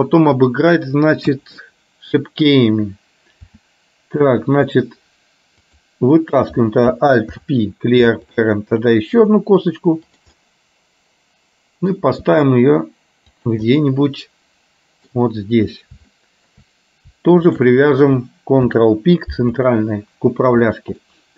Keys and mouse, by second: 0.4 click, 1.4 KP_1, 3.6 e, 7.4 alt+p, 9.2 g, 10.4-12.1 middle drag, 12.3 g, 13.8-15.2 middle drag, 16.3 shift+middle click, 18.8 ctrl+p, 21.2 middle click.